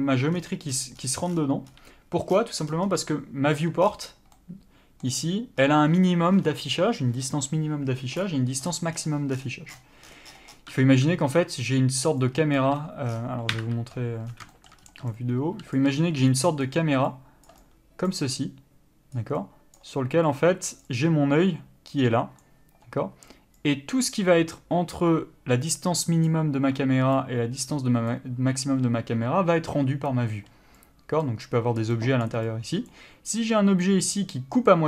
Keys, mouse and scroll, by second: 0.5 scroll down 1, 0.9 scroll up 1, 1.5 scroll down 1, 1.9-2.5 scroll up 1, 2.5-2.9 scroll down 1, 2.9 scroll up 1, 3.0 scroll down 1, 3.1 n, 4.0 scroll down 1, 4.5 middle click, 5.3 scroll up 1, 6.5 scroll down 1, 8.4 click, 8.8 scroll up 1, 9.1 scroll down 1, 10.5 scroll up 1, 11.9 click, 12.3 d, 12.4 click, 12.8 d, 13.3-13.7 scroll down 1, 13.7 KP_7, 14.5 scroll down 1, 14.7 shift+middle click, 15.0-15.3 scroll up 1, 15.3 right click, 16.0 d, 16.1-16.5 scroll up 1, 16.5 click, 16.9 d, 17.3 click, 17.7 d, 17.8 click, 18.3 d, 18.4 click, 19.4 d, 19.6 click, 20.0 d, 20.5 click, 21.0 d, 21.1 click, 22.6 d, 23.8 click, 24.3 d, 24.7 click, 26.5 d, 27.3 click, 28.3 d, 31.0 click, 31.4 d, 31.6 click, 32.4 d, 32.7 click, 33.1 d, 33.5 click.